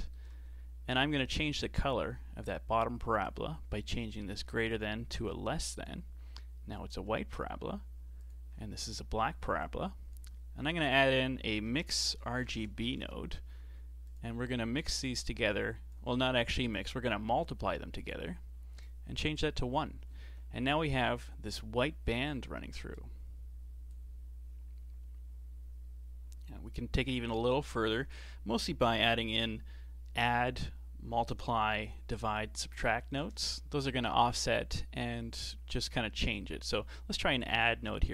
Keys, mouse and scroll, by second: 1.8 ctrl+shift+click, 4.7-7.8 drag, 8.2 ctrl+shift+click, 9.7 click, 10.7 shift+a, 15.1 drag, 16.7-21.9 drag, 23.0 click, 33.2 shift+d.